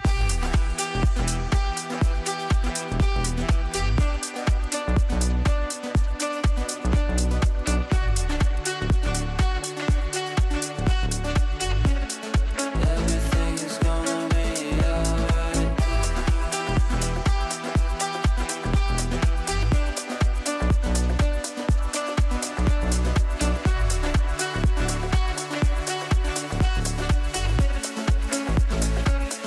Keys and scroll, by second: 0.3 t, 0.8 l, 4.4 Down, 6.4 Escape, 27.5 r.